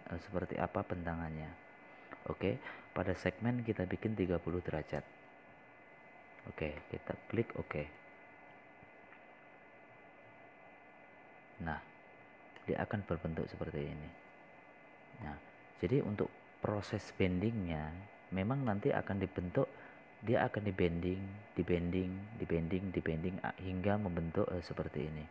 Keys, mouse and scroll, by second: 5.7 click, 7.3 KP_3, 7.6 KP_0, 10.9 click, 15.6 middle click, 16.9-18.4 middle drag, 18.4 scroll up 1, 19.0 scroll down 1, 19.8 scroll down 1, 20.5 scroll up 1, 21.1 scroll down 1, 21.7 middle click, 22.4 scroll up 1.